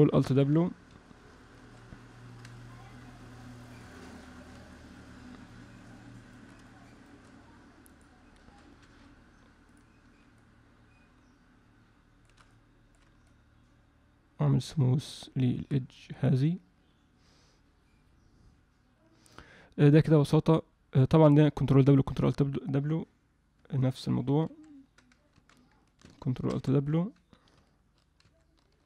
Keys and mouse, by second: 1.6 ctrl+alt+w, 2.7-4.1 alt+middle drag, 4.8-6.4 shift+drag, 6.7 shift+click, 8.0 click, 10.4-12.2 shift+drag, 12.5 alt+middle click, 13.2-15.4 shift+drag, 16.1-22.3 drag, 24.4 ctrl+w, 25.4 ctrl+z, 26.6 alt+w, 28.2 ctrl+alt+w.